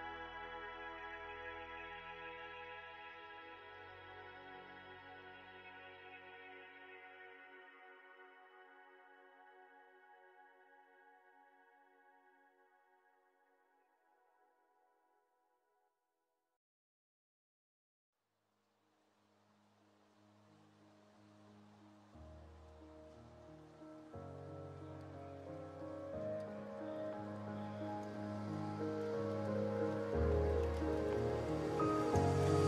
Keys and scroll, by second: 6.1 ctrl+z, 20.6 space, 21.7 space, 27.6 space, 29.7 space, 32.3 Delete.